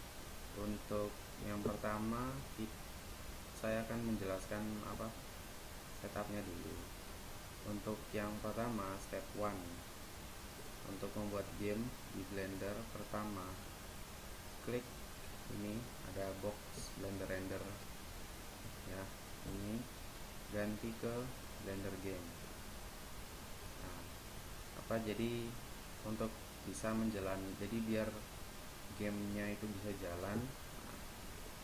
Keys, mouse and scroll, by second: 9.4-12.4 right drag, 19.6-21.4 drag, 31.4-31.6 drag.